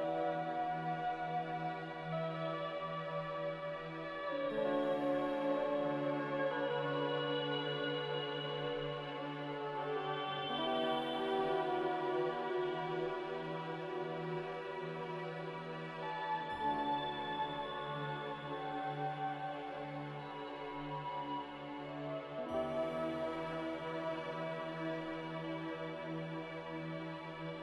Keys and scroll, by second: 0.3 5, 1.1 Return, 8.7-9.5 typing, 10.6 Delete, 13.3 Return, 15.3-16.4 typing, 17.0 Delete, 22.7-24.0 typing, 27.2 typing.